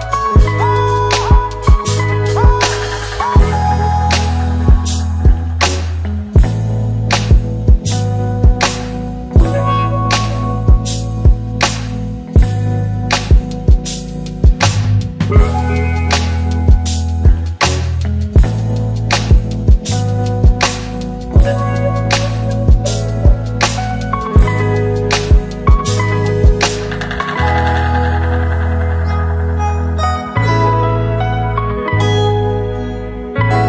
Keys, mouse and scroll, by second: 6.5 click, 8.2 space, 10.3 space, 11.5 click, 18.2 click, 26.5 click, 33.4 click.